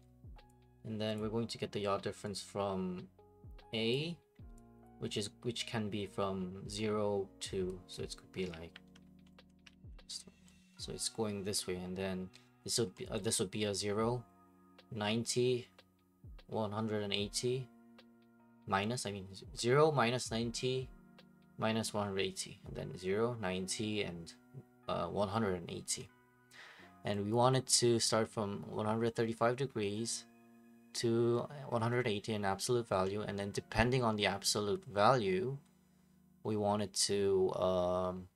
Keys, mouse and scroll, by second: 1.1 click, 3.9 click, 4.8 click, 7.9 click, 8.7 alt+h, 9.5 middle click, 9.7 alt+h, 12.9-15.0 middle drag, 26.0-28.1 middle drag, 33.0-35.1 middle drag.